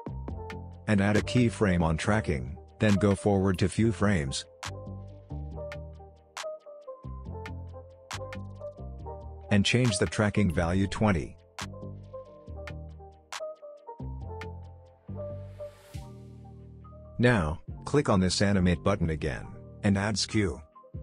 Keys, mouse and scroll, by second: 11.3 Return, 12.7 click, 15.8 click.